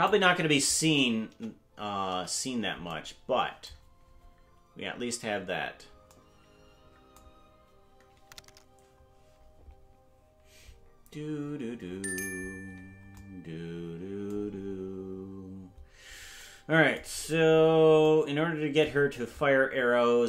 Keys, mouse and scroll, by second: 1.3 KP_0, 2.1 KP_Decimal, 4.0 scroll down 3, 12.9 scroll down 2, 17.1-17.8 scroll down 8.